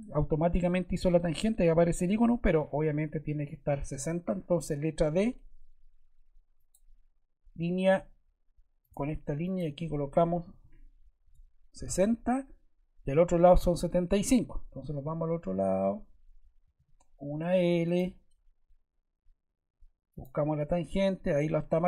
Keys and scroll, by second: 0.0 Escape, 5.0 d, 10.1-11.0 typing, 11.2 Return, 16.7 l, 20.8 Escape.